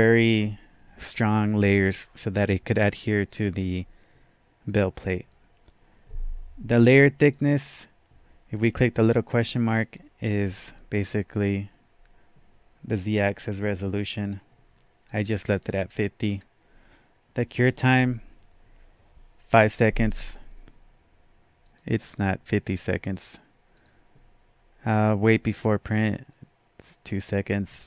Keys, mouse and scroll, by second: 7.2-15.1 drag, 15.1 click, 21.6 click, 23.7 click.